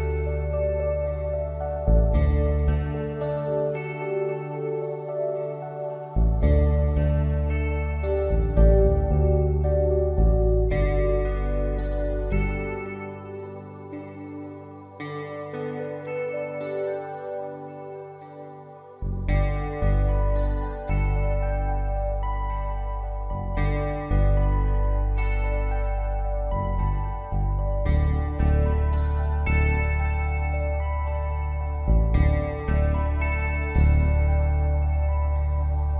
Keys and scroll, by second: 0.0-2.1 typing, 0.8 ctrl+z, 3.1 space, 4.0 space, 4.4 space, 5.1 ctrl+s, 5.7-7.9 typing, 10.0 space, 10.9 ctrl+z, 11.1 space, 11.5 space, 12.2 space, 12.7 ctrl+z, 13.5 space, 15.2-19.5 typing, 18.9 ctrl+z, 20.7 space, 21.3 space, 21.9 space, 22.7 space, 24.5 space, 27.2 space, 34.5 Return.